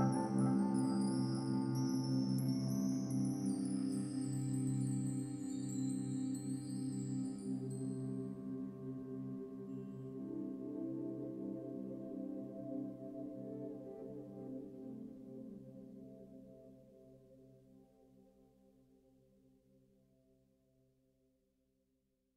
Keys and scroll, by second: 4.0 ctrl+-, 6.3 ctrl+t, 6.8 ctrl+d, 7.1 ctrl+t, 8.4 space, 10.7 Delete, 12.0 ctrl+-, 19.4 ctrl+-, 19.5 ctrl+=, 21.8 ctrl+=.